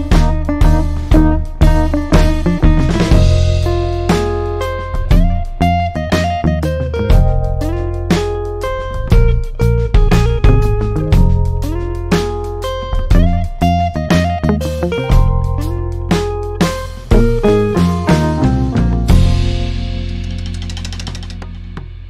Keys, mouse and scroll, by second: 1.9 ctrl+z, 4.5-11.3 drag.